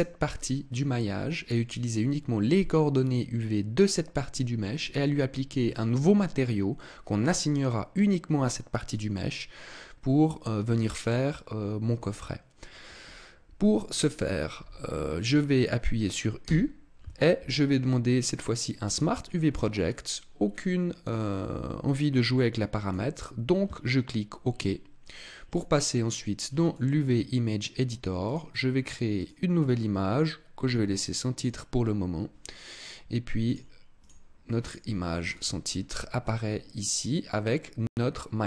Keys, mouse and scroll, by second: 16.4 u, 25.4 click.